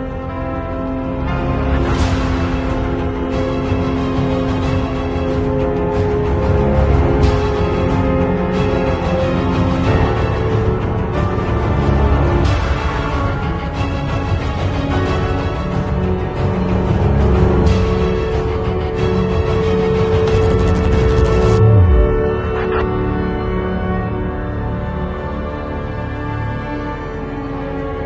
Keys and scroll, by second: 4.2 space, 5.7 r, 6.3 b, 8.6 x, 9.5 space, 9.8 r, 10.5 b, 12.3 space, 12.6 ], 14.6 x, 16.0 space, 17.9 x, 24.4 space.